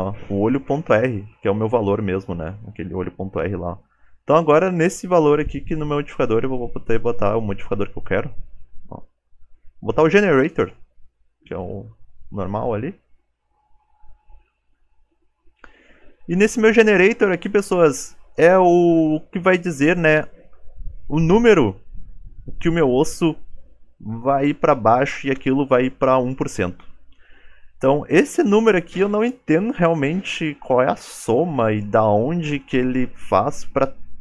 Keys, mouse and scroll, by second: 10.4 click, 21.0 click.